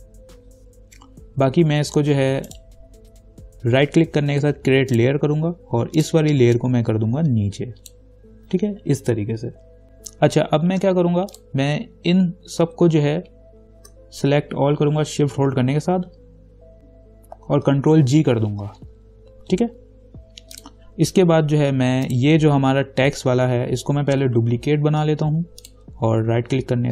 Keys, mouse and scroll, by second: 2.7 right click, 5.1-9.8 drag, 9.8-10.6 scroll down 1, 11.5 click, 12.4 scroll up 1, 13.7 shift+click, 18.2 ctrl+g, 20.8 click, 21.6-22.3 scroll down 1, 22.3 click, 25.0 ctrl+j, 25.8 click.